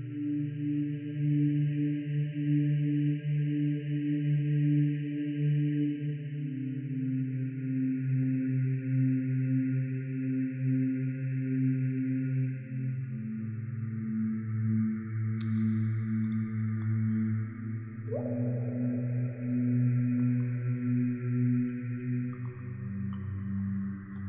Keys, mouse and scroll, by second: 0.2 middle click, 1.0-1.6 scroll up 2, 1.0 shift+middle click, 1.2 click, 1.6-2.1 middle drag, 2.2 r, 2.5-3.1 scroll up 2, 2.7 ctrl+z, 2.7 shift+middle click, 2.8 click, 3.3 ctrl+r, 3.3 click, 3.4 ctrl+click, 3.5 middle click, 3.6 scroll down 1, 3.7 middle click, 4.0 middle click, 4.1-4.7 scroll up 2, 4.3-5.4 click, 4.7 click, 5.8 click, 5.8 middle click, 6.6 click, 6.6-7.0 scroll down 1, 7.0 click, 7.0 shift+d, 7.1 right click, 7.1 click, 7.5 middle click, 7.8 click, 8.1 middle click, 8.4-8.7 middle drag, 8.6 scroll down 3, 8.9 click, 9.2 r, 9.5 ctrl+click, 9.7 click, 9.7 r, 10.3 click, 10.8 click, 11.0 middle click, 11.0 scroll up 4, 11.0 shift+middle click, 11.1 click, 11.6 click, 11.6-14.0 typing, 11.8 middle click, 11.8 right drag, 12.2 click, 12.6 click, 13.1 click, 13.5 click, 14.0 click, 14.5 click, 14.8 ctrl+r, 14.9 ctrl+click, 15.0 click, 15.0-20.2 typing, 15.1 click, 15.9 middle click, 16.6 click, 16.8 click, 17.0 click, 17.0 right click, 17.4 click, 17.5 click, 17.5 right click, 18.0 click, 18.4 shift+middle click, 18.4 scroll down 4, 18.5 scroll up 2, 18.6 right click, 18.8 click, 18.9 shift+middle click, 19.1 click, 19.5 scroll down 1, 19.8 click, 20.3 middle click, 20.3 scroll down 1, 20.4 click, 21.2 click, 21.6 s, 21.8 z, 21.9 click, 22.0 right click, 22.0 shift+d, 23.3 click, 23.5 shift+click, 23.7 shift+d.